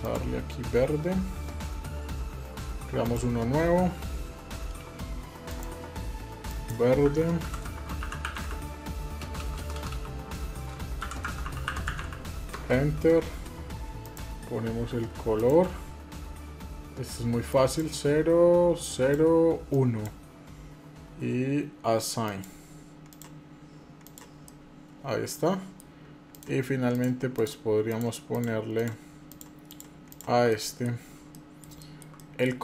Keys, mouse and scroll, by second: 2.8 click, 5.2-5.6 drag, 6.3-13.1 drag, 9.1 BackSpace, 9.5 BackSpace, 13.8 click, 15.1 click, 22.0 click, 22.9 click, 23.8 click, 24.2-25.5 middle drag, 26.1 click, 26.7 shift+click, 28.7 shift+click, 30.3 middle click, 30.7 scroll down 1, 31.1 shift+middle click, 31.9 middle click, 32.3 scroll up 2.